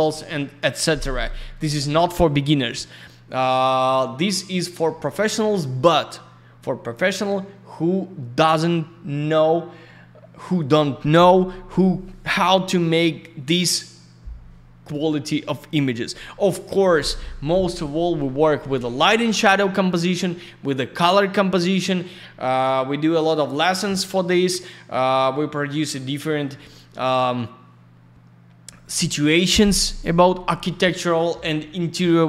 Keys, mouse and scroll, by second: 2.5 click, 13.4 click, 30.6 click.